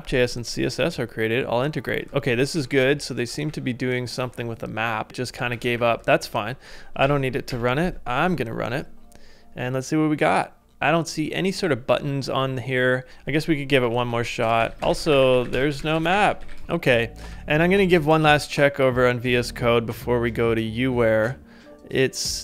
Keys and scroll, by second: 2.5 Up, 3.5 Up, 4.3 ctrl+u, 5.6 ctrl+a, 6.6 ctrl+c, 7.5 ctrl+c, 13.1 super+Tab, 14.2-16.9 typing, 17.2 super+Tab.